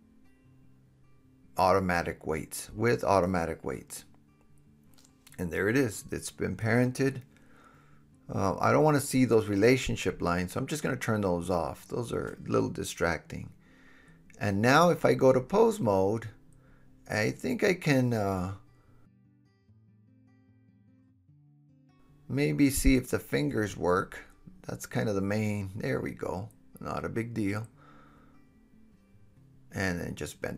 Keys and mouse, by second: 6.7 click, 7.8-9.8 drag, 13.8-15.7 drag, 21.0 KP_Decimal, 22.6-24.1 super+middle drag, 22.7 click, 22.7 right click, 23.4 click, 23.4 right click, 23.6 click, 23.6 right click, 23.8 click, 23.8 right click, 24.1-25.8 drag, 25.1 s, 25.8-27.7 middle drag, 27.5 KP_1, 27.7-28.1 drag, 28.1 middle click, 28.2-30.1 drag, 28.9 r, 30.1-30.5 middle drag.